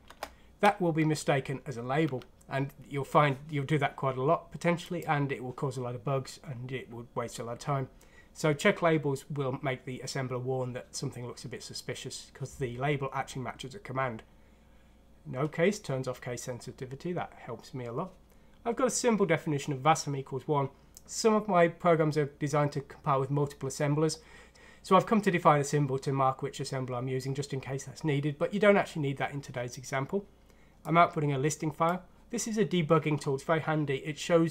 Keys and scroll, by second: 0.1 BackSpace, 2.0 Tab.